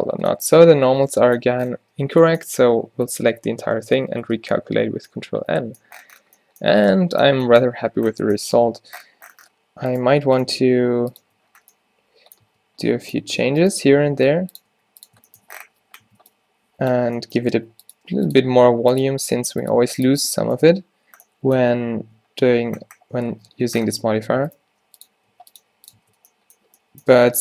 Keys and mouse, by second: 1.1 Tab, 2.9 Tab, 3.1 a, 3.3 a, 4.0 ctrl+n, 4.3 Tab, 4.7 a, 4.8-5.8 middle drag, 6.8 Tab, 7.9 Tab, 8.7 Tab, 10.0 middle click, 10.1 g, 10.8 g, 11.3 Tab, 12.6 Tab, 14.1 g, 14.8 r, 15.8-19.8 typing, 20.2 Tab, 23.6 Tab, 24.7 g, 25.4 r, 25.7 g, 26.1 Tab, 27.2 Tab.